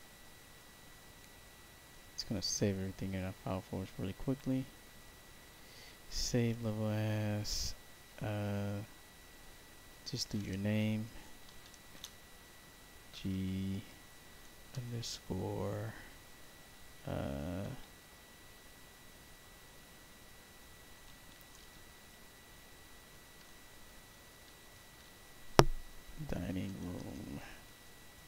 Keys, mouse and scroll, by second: 10.6 shift+m, 11.8 shift+g, 13.1 e, 13.2 e, 14.3 shift+-, 21.2 shift+d, 22.9-24.7 typing, 26.3-28.2 typing.